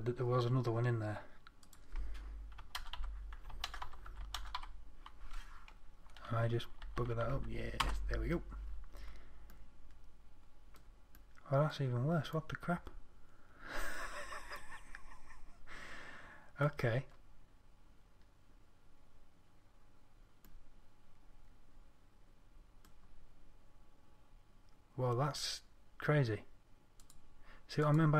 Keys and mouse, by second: 7.2 Right.